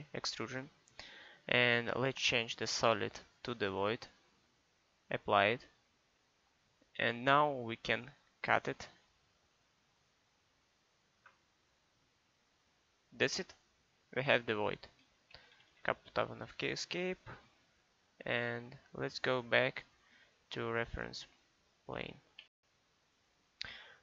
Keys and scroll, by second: 15.4 Escape.